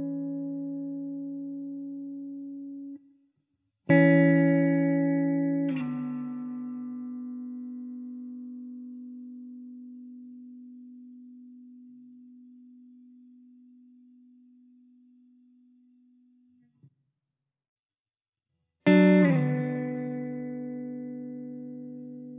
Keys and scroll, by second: 9.1 alt+z, 13.6 alt+z, 14.2 s, 17.5 shift+d, 20.0 alt+z.